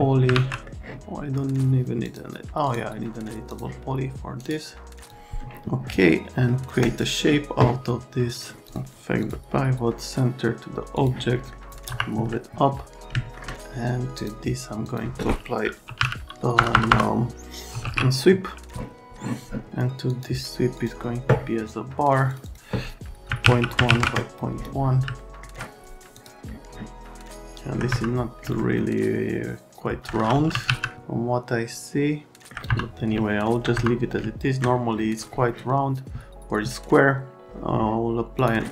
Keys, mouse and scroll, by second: 0.3 alt+1, 0.6 right click, 2.0 click, 2.6 click, 3.5 click, 5.0 click, 6.8 click, 8.3 click, 8.6 click, 9.2 click, 10.9 click, 11.4 scroll down 1, 11.9 F3, 12.3-12.8 alt+scroll down 1, 13.0 scroll down 2, 14.2 click, 14.8 click, 15.6-18.3 typing, 20.1 click, 20.8 click, 22.3 click, 22.4 click, 23.3 KP_Decimal, 23.4 KP_1, 23.7 Tab, 23.8 KP_Decimal, 23.9 KP_1, 25.2 alt+middle click, 26.1 click, 27.5 alt+middle click, 27.9 F3, 28.6 alt+middle click, 30.2-31.2 typing, 32.4 alt+middle click, 32.6 F3, 33.1 middle click, 33.7 F3, 34.2 middle click, 38.4 click.